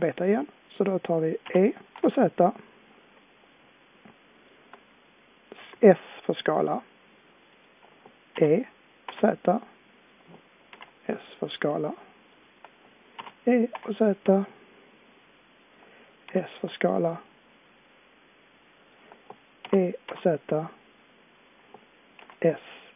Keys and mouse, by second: 1.4 e, 5.6 s, 8.3 e, 10.7 s, 13.2 e, 16.3 s, 19.7 e.